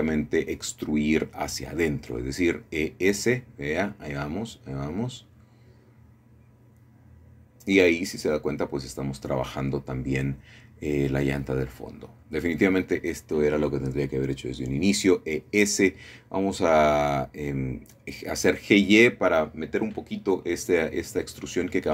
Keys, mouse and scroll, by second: 0.9 shift+click, 1.4 middle click, 2.4 1, 3.8 e, 4.7 s, 8.1 shift+click, 8.7-9.7 scroll down 1, 9.7-10.8 shift+middle drag, 10.6-11.3 scroll up 1, 11.3 shift+middle click, 12.4 scroll up 1, 13.5 middle click, 16.7-17.7 shift+drag, 20.4 g, 20.8 y.